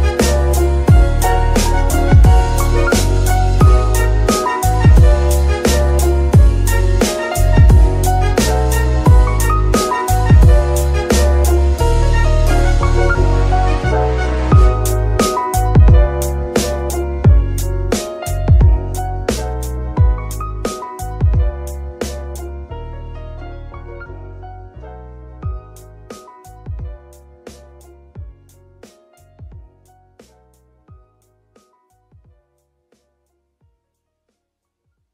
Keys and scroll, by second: 0.7 Tab, 1.2 g, 1.7 Escape, 2.0 Tab, 2.8 z, 10.7-13.0 typing, 14.8 o, 15.4 Return, 17.3 ctrl+Tab, 22.5 y, 23.5 Escape, 25.8 z, 33.7 z.